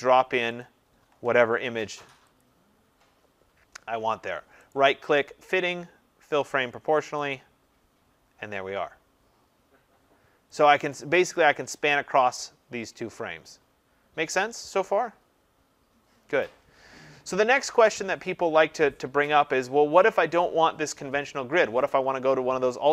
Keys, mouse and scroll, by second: 0.6 click, 4.7 right click, 7.3 click, 10.6 click.